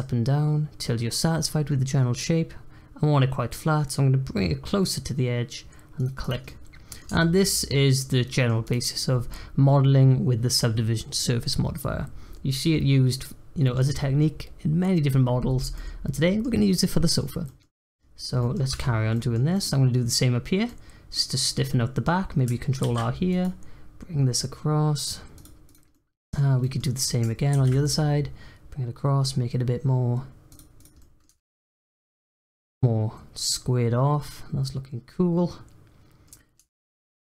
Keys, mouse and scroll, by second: 6.2 click, 6.4 middle click, 7.1 Tab, 7.3-8.6 middle drag, 8.6 click, 12.5-17.6 middle drag, 17.6 scroll up 1, 17.7 click, 18.1 scroll down 1, 18.4 middle click, 18.7 Tab, 19.1-22.8 middle drag, 22.8 ctrl+r, 25.6 click, 25.9-27.5 middle drag, 27.5 ctrl+r, 30.7 click, 30.9 middle click, 31.2 Tab, 31.4-36.6 middle drag, 36.6 Tab, 36.8 middle click.